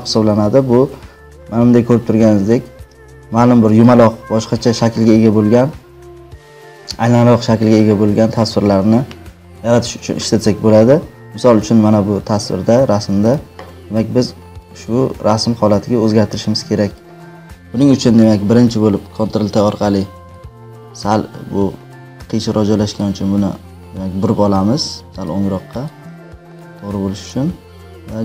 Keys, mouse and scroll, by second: 13.3-14.9 drag, 15.7 click, 18.2 click, 19.3 ctrl+t, 21.8 click, 22.9 click, 26.5-27.9 drag.